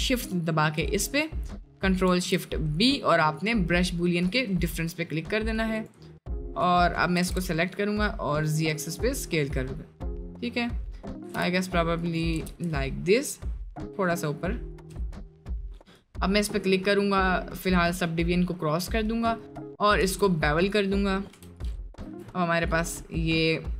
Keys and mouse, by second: 2.1 ctrl+shift+b, 5.8-7.2 drag, 7.2 s, 9.3 middle click, 10.3 middle click, 11.2 g, 12.3 g, 15.2 click, 17.6 click, 18.2-18.8 middle drag, 18.9 middle drag, 20.0 ctrl+a, 20.7 click, 21.3 Delete, 22.1 Tab, 22.5 middle click.